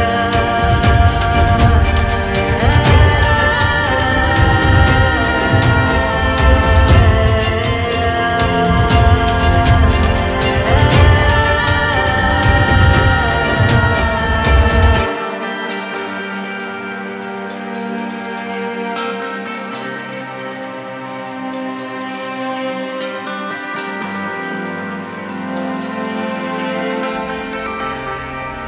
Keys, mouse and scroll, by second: 0.3 middle click, 0.6 click, 1.3 KP_3, 1.9 middle click, 2.2 click, 3.4 click, 5.0-7.3 drag, 7.3 x, 7.4 shift+a, 8.6 ctrl+shift+click, 10.2 click, 11.0 Tab, 11.4 a, 11.5 alt+n, 11.8 Tab, 12.1-13.3 drag, 13.4-16.2 drag, 17.0 click, 17.9 click, 20.5 click, 20.8 scroll up 2, 21.0 KP_Decimal, 21.9-23.9 middle drag, 23.9 click, 24.1-24.7 scroll down 8, 24.3 middle click, 24.7 click, 25.4 x, 25.6 shift+a, 27.0-27.7 ctrl+shift+drag, 28.3-28.6 scroll up 5, 28.4 middle click.